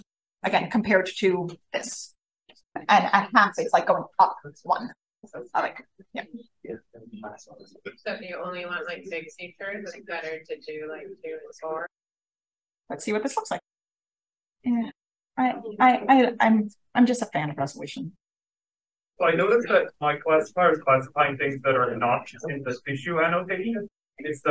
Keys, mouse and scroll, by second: 7.2 click, 8.0 click, 9.2 click, 12.5-13.5 scroll down 2, 13.5 click, 14.1-15.3 scroll up 1, 15.3 click, 18.6 click, 22.9-24.5 scroll down 3.